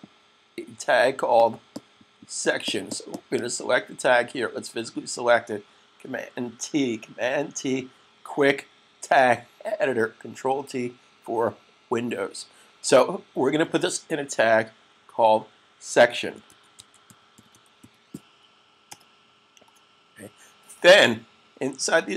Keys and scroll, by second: 7.6 super+t, 15.9-18.1 typing.